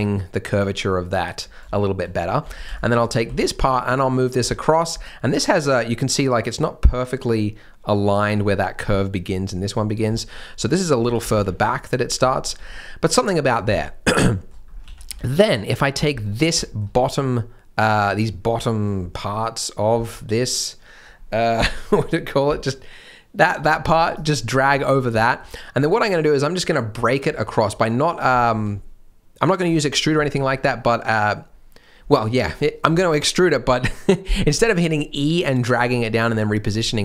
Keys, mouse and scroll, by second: 1.4 scroll down 1, 1.7 shift+m, 2.5 alt+a, 2.6 b, 3.2 g, 4.3 g, 5.4 scroll down 1, 9.9 scroll up 1, 10.1 shift+middle click, 10.5 g, 11.2 g, 12.0-13.0 scroll down 2, 12.2 shift+middle click, 13.7 alt+a, 14.3 shift+m, 14.6 scroll up 1, 14.8 alt+a, 15.0 b, 15.6-15.9 scroll up 1, 16.0 shift+m, 17.3 middle click, 18.2-18.6 scroll down 1, 18.6 middle click, 20.1 scroll down 1, 20.3 middle click, 23.9 click, 24.7-25.1 scroll up 1, 25.2 shift+middle click, 27.4-27.7 scroll down 1, 28.3 shift+middle click, 29.9 scroll up 1, 30.2 shift+middle click, 30.6 scroll up 1.